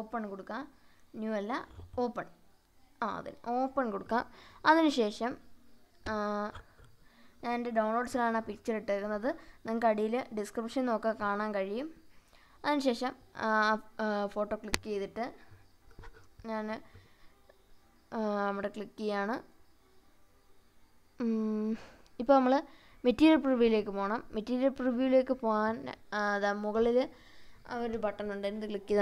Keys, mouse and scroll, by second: 3.5 click, 27.4 click.